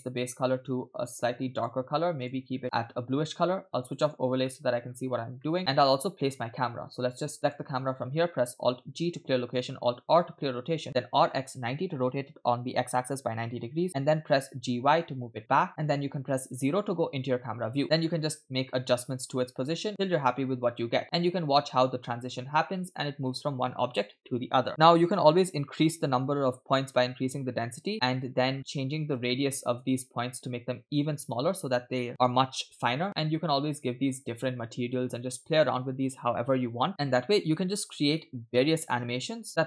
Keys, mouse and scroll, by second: 0.1 click, 3.9-4.4 drag, 4.5 middle click, 4.9-5.3 scroll up 2, 5.5 shift+middle click, 5.9-6.7 scroll down 3, 7.4 click, 8.7 alt+g, 10.2 alt+r, 11.2 r, 14.5 g, 16.7 KP_0, 17.7 scroll down 1, 17.8 scroll up 1, 17.8 g, 20.1 space, 21.0-22.2 scroll up 1, 22.2 scroll up 1, 24.1 space, 24.7 space, 26.8-28.5 typing, 28.5-29.2 scroll up 5, 29.4-30.2 shift+middle drag, 29.6-30.2 scroll up 1, 30.2-30.5 scroll up 1, 30.9-31.5 scroll down 2, 31.5 scroll down 2, 33.0-33.4 scroll down 2, 33.4-35.1 typing.